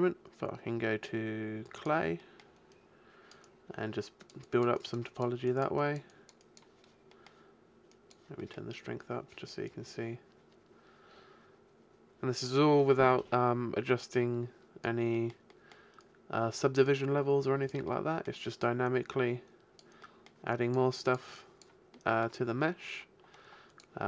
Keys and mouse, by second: 2.2 middle click, 2.7-11.6 drag, 15.2 middle click, 16.0-17.8 drag, 18.0 middle click, 18.6 click, 19.4 middle click, 19.4 click, 20.0 middle click, 20.6-21.9 drag, 22.0 middle click, 22.2-23.2 drag, 23.2 middle click, 23.7-24.0 drag.